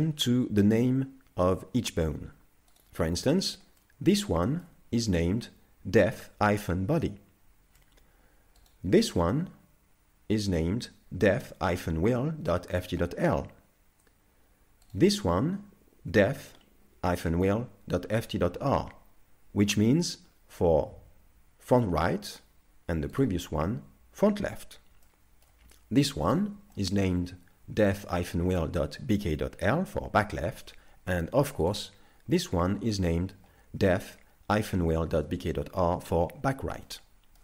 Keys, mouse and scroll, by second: 2.8 right click, 3.3 shift+middle click, 3.8 middle click, 4.5 shift+middle click, 8.6 right click, 14.9 right click, 23.2 right click, 25.1 shift+middle click, 26.3 right click, 26.8 shift+middle click, 31.7 right click, 36.9 shift+middle click.